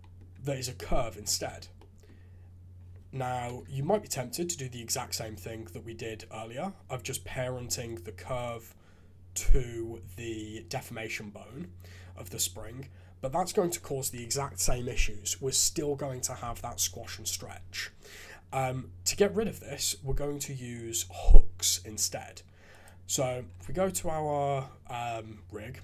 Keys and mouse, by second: 0.7-1.2 drag, 1.4 shift+z, 1.7 click, 3.3 KP_3, 3.7 shift+z, 7.8 click, 20.4 middle click, 22.7 click.